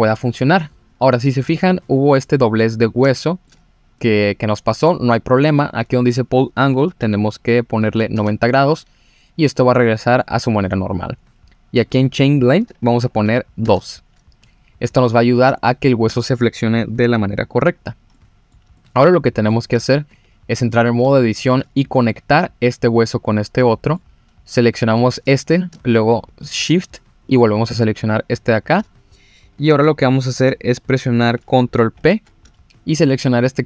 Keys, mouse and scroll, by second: 1.9-2.6 middle drag, 3.1-3.5 shift+middle drag, 3.7 scroll up 1, 4.0-4.9 middle drag, 5.9-8.2 drag, 9.7-10.2 middle drag, 11.8-13.6 drag, 15.6-16.1 shift+middle drag, 17.8-18.1 scroll down 1, 18.1-18.5 middle drag, 18.7-19.5 middle drag, 20.1 Tab, 20.6 click, 21.1 shift+middle click, 23.6 middle click, 27.3-28.7 shift+drag, 31.9 ctrl+p.